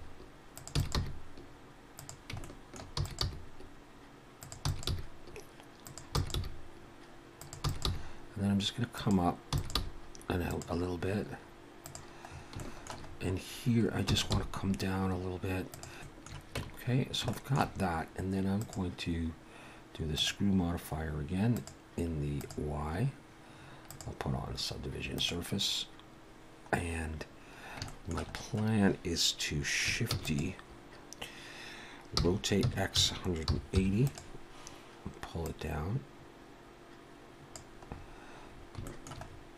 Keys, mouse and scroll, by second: 0.8 e, 1.0 g, 2.4 shift+middle click, 3.0 e, 3.2 g, 4.7 e, 4.9 g, 6.2 e, 6.3 g, 7.7 e, 7.9 g, 9.5 e, 9.8 g, 10.9-11.4 scroll down 2, 11.8 click, 12.3 scroll up 2, 12.6 shift+middle click, 13.1-13.8 scroll up 5, 14.1 e, 14.3 g, 15.9 scroll up 1, 16.0 shift+middle click, 16.6 Tab, 16.9-17.2 scroll down 2, 17.3 shift+middle click, 17.8-18.2 scroll up 1, 18.6 click, 21.5 click, 22.9-23.3 scroll up 3, 23.9 click, 27.4-27.7 scroll down 1, 27.9 shift+middle click, 30.1 shift+d, 32.2 r, 35.5 click, 37.6 click, 37.9-38.3 scroll up 4, 38.5-38.9 scroll up 2, 38.9 shift+middle click, 39.3-39.5 scroll up 2.